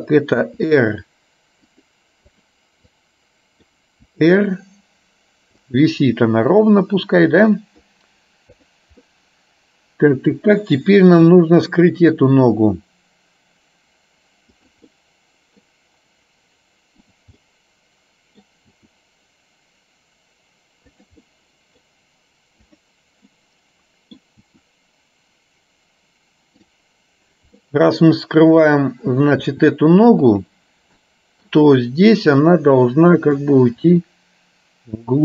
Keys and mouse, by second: 0.6 r, 2.4 click, 3.0-4.0 drag, 4.3 r, 7.6 middle click, 8.8 click, 9.1-10.6 middle drag, 11.4 r, 15.0 middle click, 17.5-18.5 middle drag, 18.9 r, 21.4 middle click, 23.4 middle click, 24.5 r, 27.6-29.1 middle drag, 29.6 r, 31.1 middle click, 33.0 middle click, 33.9 r.